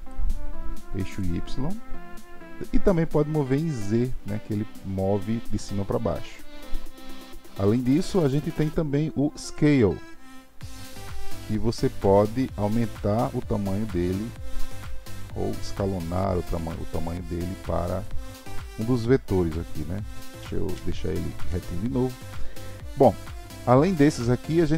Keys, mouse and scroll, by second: 1.1 click, 3.5 click, 9.5-12.6 drag, 12.7 click, 15.5 click, 18.0 click, 20.4 ctrl+z, 20.7 ctrl+z, 23.5-24.7 drag.